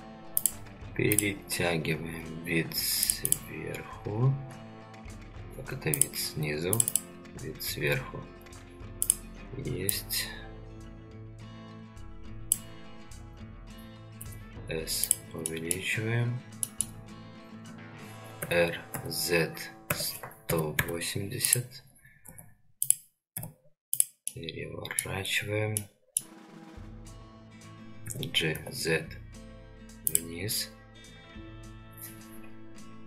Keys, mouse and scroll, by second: 13.0-14.2 scroll up 3, 14.2 s, 15.5-15.8 shift+middle drag, 16.0 scroll down 2, 16.6 shift+middle click, 18.4 r, 22.3 s, 23.3 g, 24.3-25.0 middle drag, 25.8 middle click, 28.0 g.